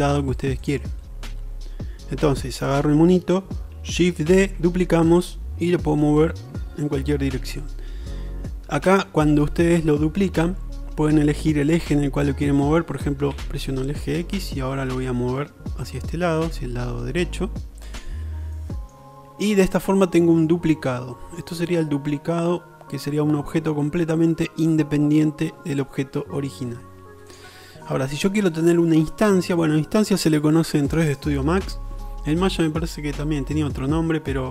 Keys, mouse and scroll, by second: 0.7 middle click, 2.3 n, 4.3 shift+d, 6.2 right click, 7.0-8.6 right drag, 9.2 right click, 10.2-19.0 drag, 19.0-21.5 middle drag, 27.4 click.